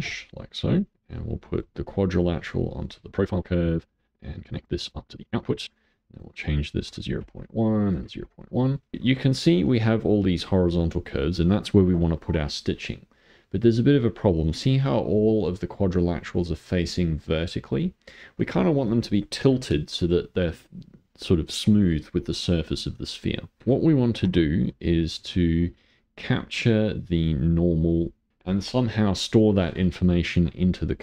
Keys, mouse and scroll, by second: 1.2 click, 1.8 click, 3.5 click, 4.9 click, 6.1-8.7 drag, 8.9-13.0 shift+middle drag, 13.0-15.0 scroll up 2, 15.0-16.4 scroll up 1, 23.6 click, 24.1 shift+a.